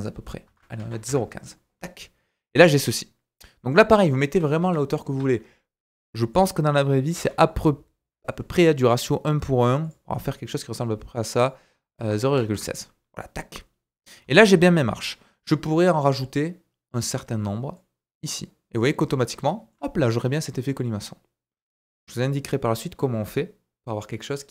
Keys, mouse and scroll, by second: 1.8 middle click, 4.0-6.3 middle drag, 4.6 KP_1, 5.1 KP_3, 6.3 click, 6.4-11.4 middle drag, 7.1 g, 11.4-16.9 drag, 13.1 middle click, 14.2 scroll down 1, 14.4 middle click, 16.9 middle click, 17.7-24.5 drag, 19.0-19.3 scroll down 4, 19.5 shift+middle click, 20.2 scroll down 1, 20.4 middle click.